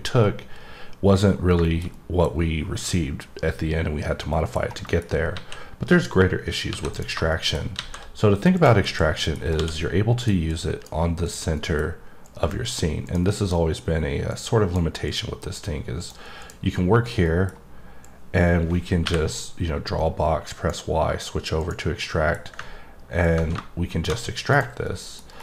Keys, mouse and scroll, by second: 1.3-1.6 scroll down 1, 1.6 middle click, 1.9 double middle click, 4.0-4.3 scroll down 1, 4.3 middle click, 4.8 middle click, 6.9 click, 7.3 middle click, 8.5 click, 9.1 middle click, 9.4-10.2 scroll down 3, 10.2 click, 10.5 click, 11.4 click, 11.5 middle click, 12.2 click, 13.0 click, 14.3 click, 15.0 click, 15.6 click, 16.4 click, 17.2 middle click, 18.0 click, 21.6 click, 22.0 middle click, 23.2 click, 24.5 right click, 24.8 middle click, 25.3 scroll down 1.